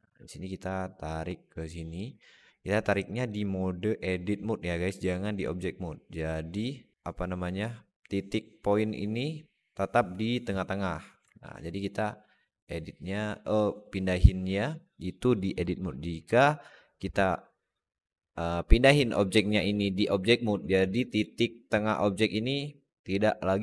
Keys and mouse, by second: 0.5 click, 0.7-1.8 drag, 3.0 alt+shift+middle click, 3.3 alt+middle click, 6.1 click, 6.9 Tab, 11.1 Tab, 11.9-15.5 drag, 16.0 Tab, 19.9-20.9 drag.